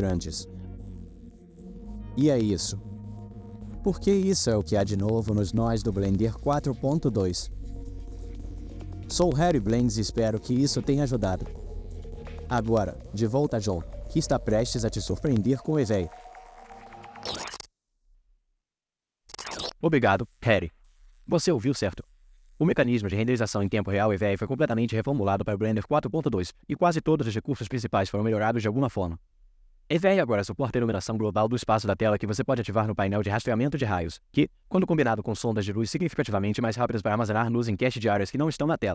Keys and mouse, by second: 32.3 click, 34.9 z.